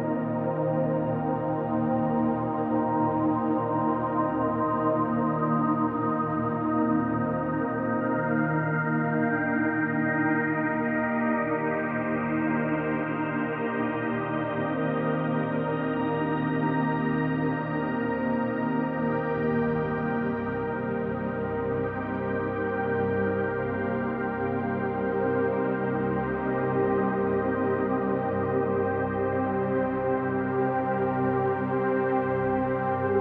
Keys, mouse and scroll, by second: 0.3 click, 5.2 alt+shift+click, 6.3 alt+shift+click, 7.7 alt+click, 8.7-9.5 drag, 10.1 click, 10.5 click, 12.4 click, 13.2 alt+click, 14.1 click, 15.0 alt+shift+click, 15.8 alt+shift+click, 16.6 ctrl+alt+click, 17.6 click, 18.6 click, 19.5 click, 19.8 click, 20.1 click, 20.4 click, 21.2-22.2 typing, 22.7 click, 23.5 click, 24.3 click, 25.9 ctrl+alt+click, 27.3 alt+click, 28.2-30.5 drag, 31.2 ctrl+alt+click, 32.3-33.2 drag.